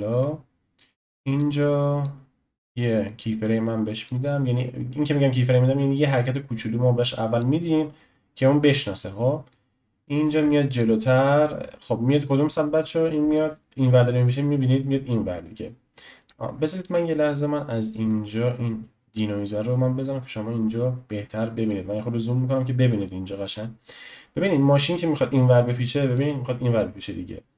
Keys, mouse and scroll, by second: 1.4-3.0 drag, 3.0-4.0 shift+middle drag, 4.0 click, 9.5-12.8 drag, 13.3-16.3 drag, 16.8 ctrl+z, 19.1 click, 20.4-21.7 scroll up 3, 21.7-22.4 scroll up 2, 23.0-26.1 shift+middle drag, 26.1-27.5 drag.